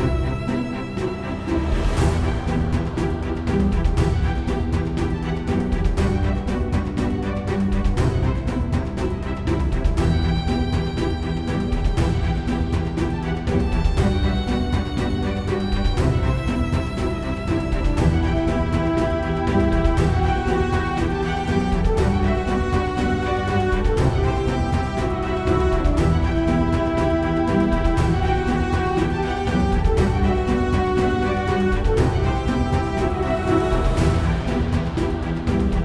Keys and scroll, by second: 0.0-0.3 typing, 1.4-2.2 typing, 10.3 =, 11.0 Down, 11.4 Return, 16.4 typing, 34.8-35.6 typing.